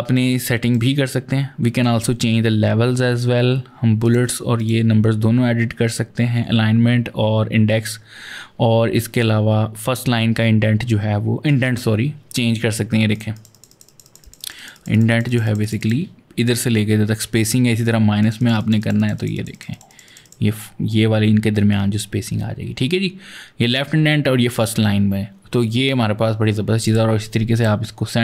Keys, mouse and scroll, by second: 3.8 click, 4.3 click, 12.9 click, 13.1 double click, 13.3 click, 13.5 click, 13.6 double click, 13.8 click, 14.0 click, 14.2 double click, 14.3 click, 14.5 click, 14.7 double click, 14.9 click, 15.1 click, 15.2 double click, 15.4 click, 15.6 click, 18.0 click, 18.2 double click, 18.4 click, 18.6 click, 18.7 double click, 18.9 click, 19.1 click, 19.3 double click, 19.5 click, 19.7 click, 19.8 double click, 20.0 click, 26.6 click, 27.3 click.